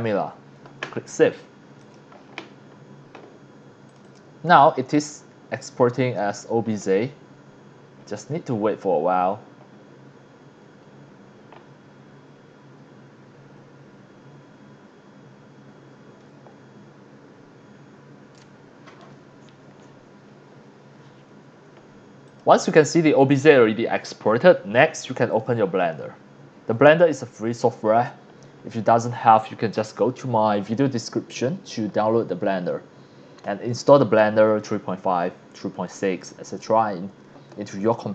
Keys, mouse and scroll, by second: 0.0-0.4 typing, 1.8 click, 3.9 click, 4.0 click, 5.6 click, 22.2 click, 22.8 click, 25.3 click.